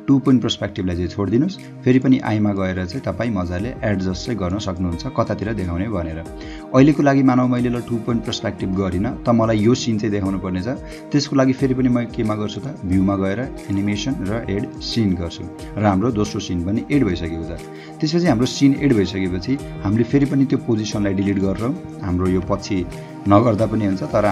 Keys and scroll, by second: 17.1 space, 19.5 h, 20.5 space, 22.5 Delete, 23.4 h.